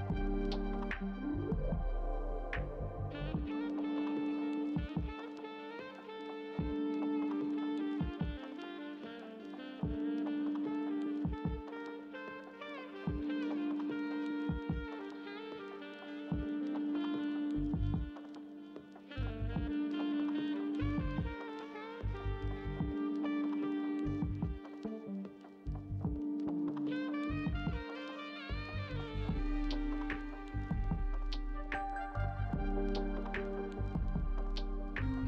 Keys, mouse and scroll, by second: 19.3 Delete.